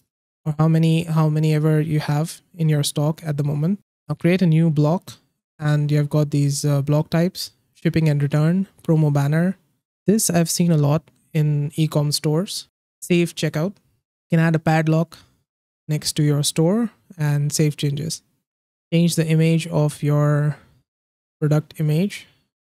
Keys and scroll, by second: 0.1 Left.